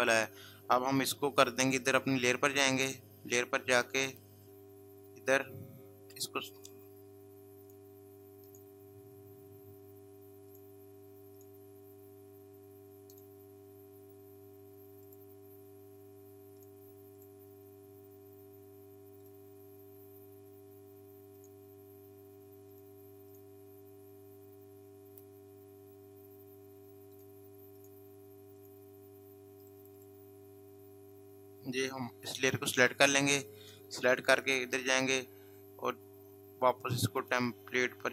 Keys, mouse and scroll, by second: 0.8 click, 6.0 click, 21.3 click, 27.1 click, 34.3 click, 36.9 click.